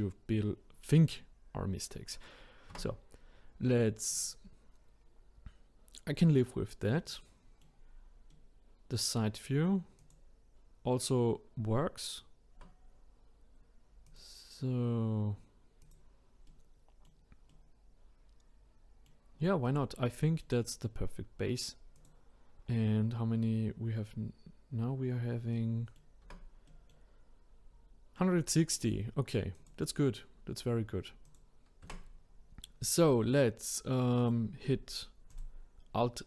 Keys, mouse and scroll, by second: 1.4-2.1 scroll down 3, 2.1-2.7 scroll up 1, 2.7 Tab, 4.1-7.0 drag, 7.0-7.9 middle drag, 7.9-8.3 scroll down 1, 8.3-10.0 middle drag, 10.0 click, 10.7-12.5 scroll up 2, 12.5 Tab, 14.0 click, 15.8 click, 16.4-19.3 middle drag, 19.3-19.7 scroll down 3, 19.7-21.9 middle drag, 21.9 click, 25.5 middle click, 26.2 Tab, 26.7-29.5 middle drag, 29.5 click, 31.2 click, 31.8 Tab, 32.8-33.3 scroll up 4, 34.2 click, 35.3-36.2 alt+drag.